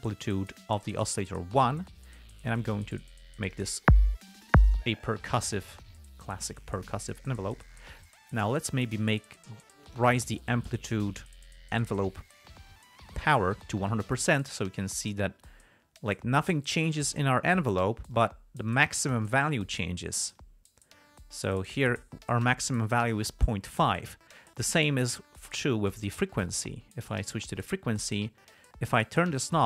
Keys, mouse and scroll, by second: 0.2 click, 2.9 click, 5.9 click, 6.4-7.4 drag, 9.3 click, 10.6-11.7 drag, 14.7-17.0 drag, 18.4-19.2 drag, 20.7-23.0 drag, 27.9 click.